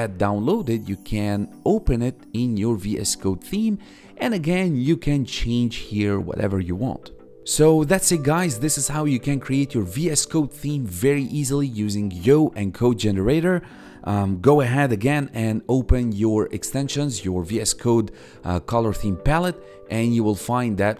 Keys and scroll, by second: 14.8 ctrl+k, 14.9 ctrl+t, 15.1 ctrl+k.